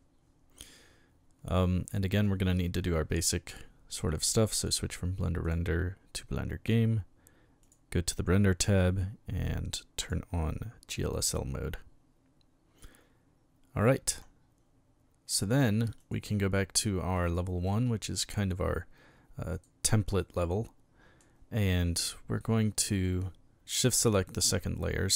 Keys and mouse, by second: 4.6 click, 5.4 click, 7.6 click, 10.0 click, 16.0 click, 17.1 click, 19.5 right click, 20.2-21.2 middle drag.